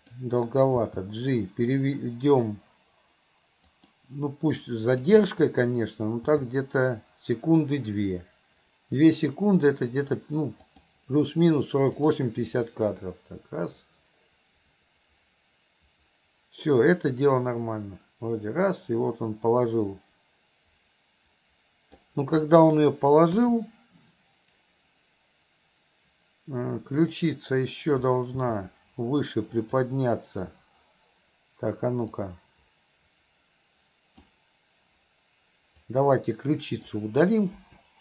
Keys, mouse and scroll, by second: 0.9 g, 4.6-5.1 drag, 6.4 g, 12.1 click, 12.6-22.2 drag, 27.1 click, 28.5 r, 32.2-34.4 drag, 35.8-37.0 drag, 37.7 Delete.